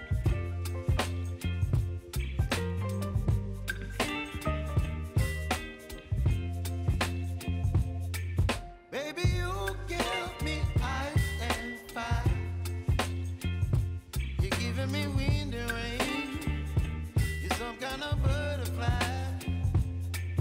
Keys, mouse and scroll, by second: 0.7 click, 1.4 right click, 2.3 click, 4.2 ctrl+x, 5.5 click, 6.4 ctrl+shift+v, 7.5 click, 8.0-10.4 typing, 10.9 Return, 12.1 click, 13.1-14.6 typing, 15.9 click, 20.3 right click.